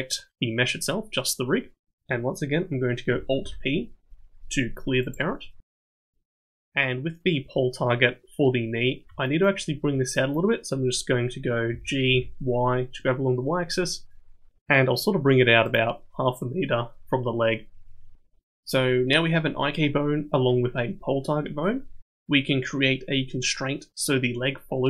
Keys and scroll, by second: 3.4 alt+p, 11.7 g.